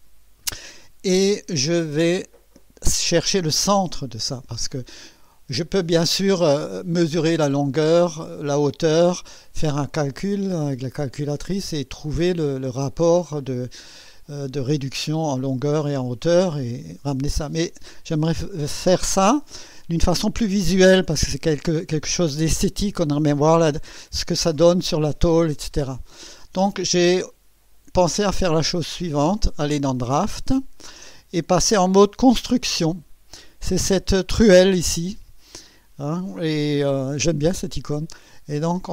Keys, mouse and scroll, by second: 0.4-1.2 right drag, 10.6 click, 12.5 click, 28.3 click, 29.2 click, 38.7 click.